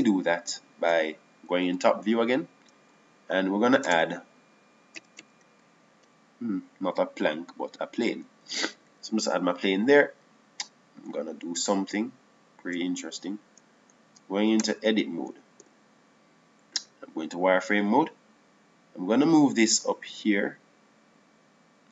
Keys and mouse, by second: 1.7 middle click, 3.5 KP_7, 5.6 space, 12.8 Tab, 14.4 Tab, 16.5 Tab, 17.6 KP_1, 18.5 z, 20.3-21.9 drag.